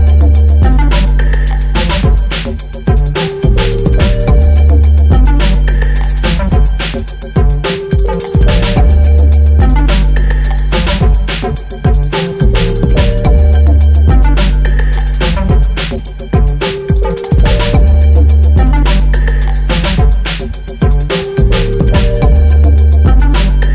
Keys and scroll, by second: 3.1 ctrl+t.